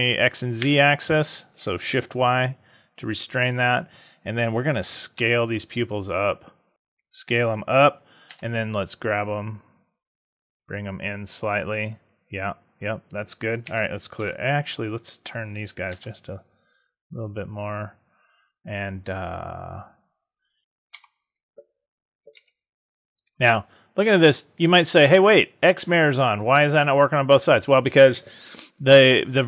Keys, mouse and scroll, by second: 0.5 shift+y, 5.1 s, 7.0 click, 8.2 g, 10.5 click, 13.5 a, 14.1 l, 15.8 r, 17.6 click, 20.6 a, 20.8 l, 22.2 s, 24.6 click.